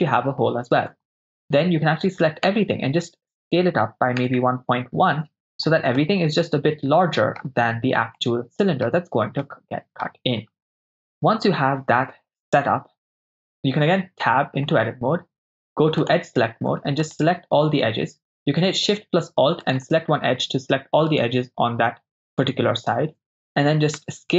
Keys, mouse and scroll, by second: 0.9 Tab, 2.5 s, 4.2 1, 4.3 ., 4.4 1, 5.3 Return, 6.1-7.4 middle drag, 8.2-8.8 middle drag, 9.6-10.0 middle drag, 11.0 KP_0, 14.1 Tab, 16.0 click, 17.1 alt+shift+click, 17.1 alt+shift+right click, 19.7 alt+shift+click, 21.1 alt+shift+click, 22.5 alt+shift+click, 24.0 s.